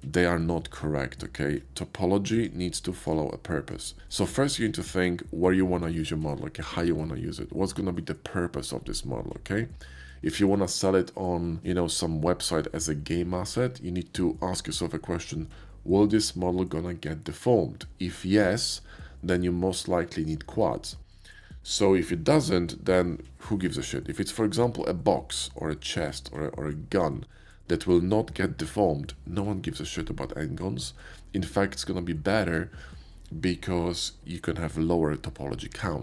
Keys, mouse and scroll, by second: 2.3 click, 2.9 click, 3.7 click.